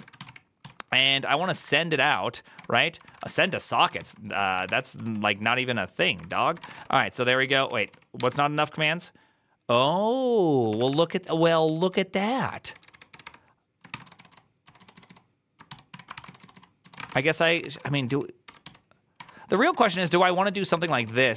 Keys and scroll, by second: 0.0-8.6 typing, 2.4 Tab, 10.6 ctrl+o, 10.8 ctrl+c, 11.3-21.3 typing, 17.0 ctrl+c.